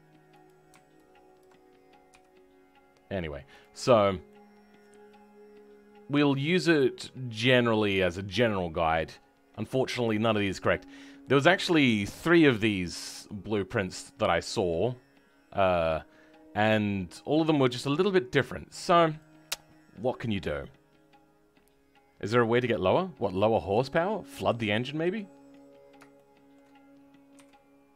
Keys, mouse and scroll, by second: 2.0 g, 3.9 scroll down 2, 4.2 middle click, 5.5-11.3 middle drag, 7.7-11.2 right drag, 11.4 middle click, 11.9-17.1 scroll down 2, 17.1-19.1 middle drag, 19.1 click, 24.3 KP_3, 25.3-26.1 scroll up 2, 26.1-27.3 shift+middle drag, 27.3 e.